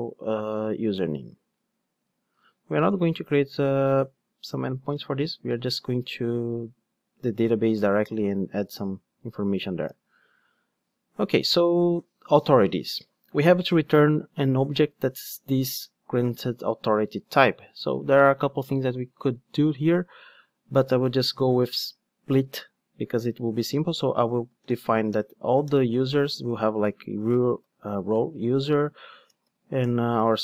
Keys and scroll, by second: 2.4 super+v, 5.8 super+x, 7.4 super+z, 8.3 super+x.